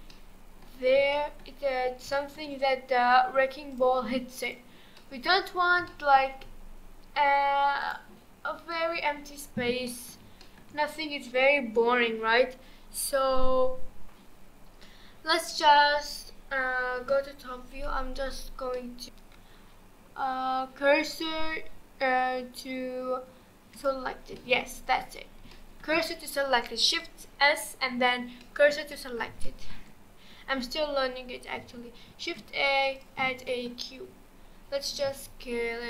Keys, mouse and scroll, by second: 0.1-1.6 middle drag, 1.6-2.1 scroll up 3, 2.1-3.7 shift+middle drag, 3.7 click, 4.5 click, 5.0-5.5 middle drag, 5.5-5.9 scroll up 1, 5.9-7.8 shift+middle drag, 7.8 click, 8.4-8.7 scroll down 2, 8.7-13.4 middle drag, 17.0 KP_7, 18.7 middle click, 19.1 shift+s, 23.7 shift+click, 24.4-32.1 middle drag, 32.1 shift+a, 33.5-34.0 middle drag, 34.0-35.1 scroll up 5, 35.1 s.